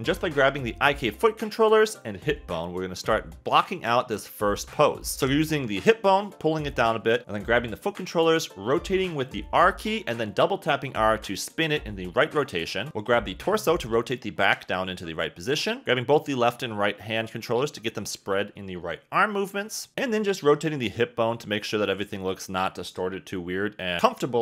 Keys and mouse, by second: 0.1 click, 0.4 g, 1.1 r, 1.2 r, 1.9 r, 2.7 click, 2.9-5.5 typing, 5.7 click, 7.7 click, 8.8 r, 10.1 g, 10.4 r, 11.0 click, 12.1 click, 12.5 r, 13.6 g, 15.3-17.7 typing, 16.6 click, 17.2 click, 20.3 r, 21.0 g, 22.7 click, 22.9 r, 23.5 r, 23.6 r.